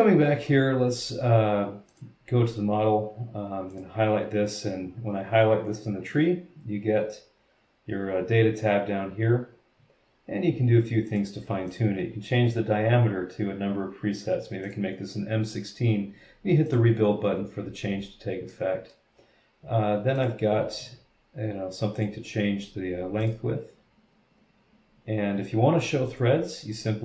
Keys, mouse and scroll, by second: 1.9 click, 3.7 click, 11.1 click, 11.7 click, 14.6 click, 16.6 click, 17.6-18.3 scroll down 2, 18.5 middle click, 20.2 click, 20.7 click, 22.0 click, 23.2 click, 26.0 click, 26.7 click.